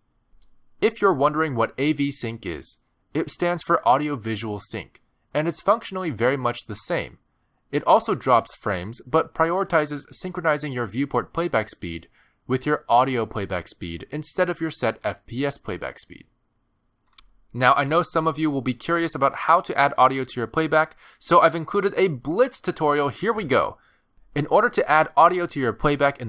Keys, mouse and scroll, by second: 4.5 click.